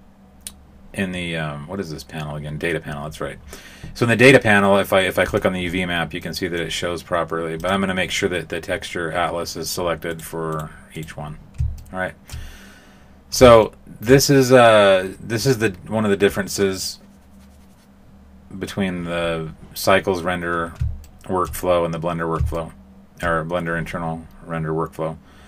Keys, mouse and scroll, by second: 5.2 click, 6.2 middle click, 7.5 click, 10.1 right click, 10.5 right click, 11.0 right click, 11.7 shift+middle click, 13.6 shift+middle click, 21.0 shift+middle click, 22.5 shift+middle click.